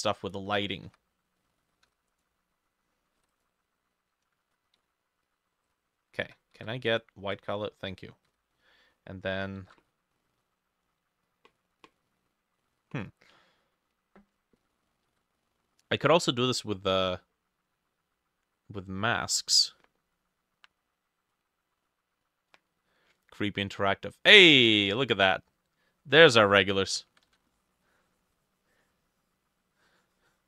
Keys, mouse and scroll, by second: 0.9 b, 1.9 f, 3.2-11.6 drag, 3.2 x, 4.3-6.3 typing, 8.3 b, 9.4 ctrl+shift+middle click, 9.6 ctrl+shift+a, 27.3 ctrl+z.